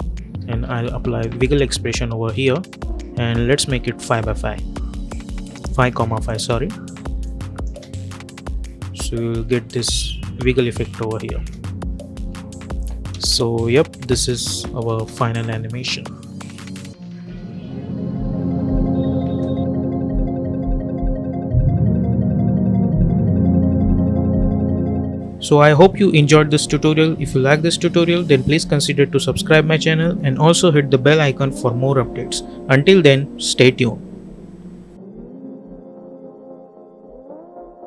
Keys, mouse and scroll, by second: 0.0-1.4 typing, 1.7 Return, 3.5-4.6 typing, 6.1 click, 7.6 space, 11.2-13.0 typing, 14.4 n, 14.8 space.